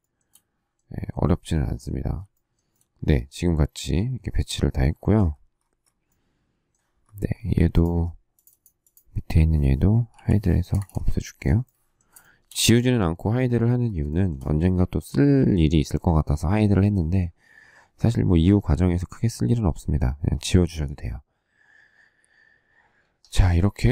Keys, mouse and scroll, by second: 2.3 shift+middle click, 2.7 shift+middle click, 10.1 h, 10.6 space, 10.7 Escape, 12.1 shift+middle click, 14.0 shift+middle click.